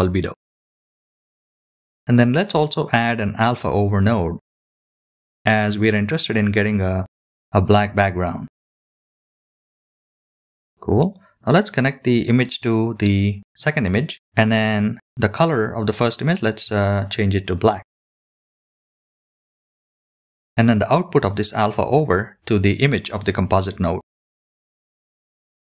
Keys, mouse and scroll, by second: 1.3 shift+a, 9.2-11.5 drag, 12.5 click, 17.1 click, 18.5 click, 20.0-21.1 drag, 24.4 middle click, 25.0-25.5 scroll up 1.